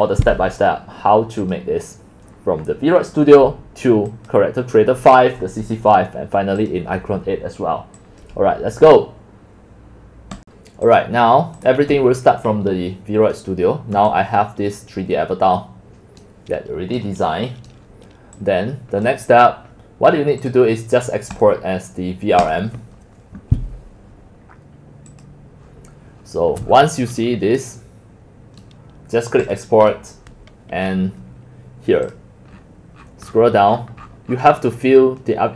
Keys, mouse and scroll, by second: 1.7 click, 4.1 click, 6.7 click, 8.1 click, 10.5-12.8 drag, 12.8-14.0 middle drag, 14.2 middle click, 14.4-16.2 middle drag, 16.2 click, 16.5-18.4 right drag, 18.4-18.8 drag, 18.8 right click, 18.9-26.7 drag, 26.7-28.4 middle drag, 26.7-27.5 scroll, 28.4 scroll down 3, 28.6-29.6 right drag, 29.6-32.5 drag, 32.5-33.7 scroll down 22, 33.3-35.5 middle drag, 33.7-35.5 scroll up 27.